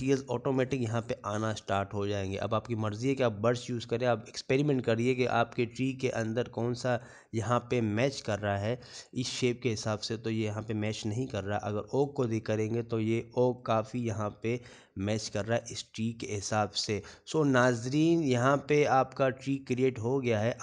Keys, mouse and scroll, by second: 6.1 scroll up 2, 6.7 shift+middle click, 6.7 scroll up 2, 7.3 scroll up 2, 8.1 shift+middle click, 15.2-15.7 scroll down 2, 15.6 middle click, 16.9 scroll up 1, 17.0 scroll down 4, 17.3-17.6 scroll up 1, 17.6 middle click, 18.6-19.1 scroll down 2, 19.1 shift+middle click, 20.1 scroll up 1.